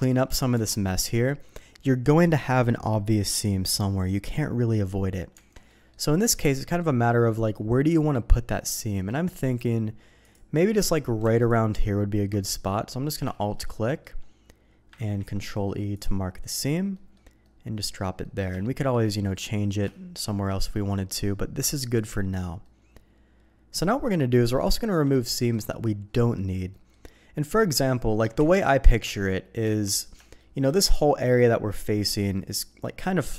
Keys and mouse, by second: 0.0 middle click, 0.5 Tab, 5.3 Tab, 5.7 middle click, 7.3 middle click, 8.1 middle click, 9.4 middle click, 10.2 click, 12.5 middle click, 13.3 shift+middle click, 13.7 middle click, 15.0 ctrl+e, 16.9 middle click, 17.4 middle click, 18.2 middle click, 18.6 shift+click, 18.7 shift+middle click, 19.0 middle click, 19.9 shift+middle click, 21.3 middle click, 22.0 middle click, 22.6-23.8 middle drag, 24.1 middle click, 24.6 shift+middle click, 25.3 middle click, 26.1 middle click, 26.7 middle click, 28.4 KP_3, 29.6 Tab, 30.2 shift+middle click.